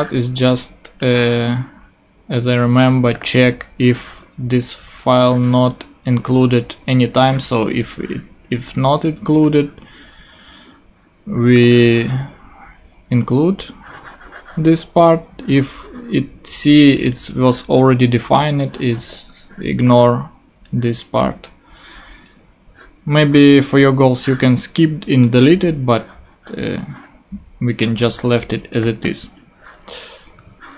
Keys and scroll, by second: 30.3 super+s.